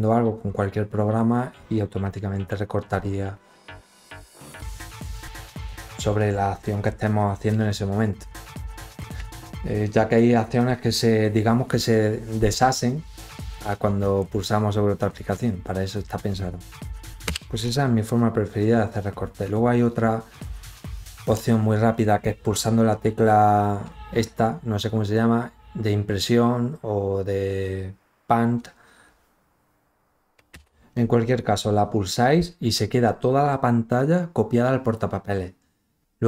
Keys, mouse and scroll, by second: 19.7 click.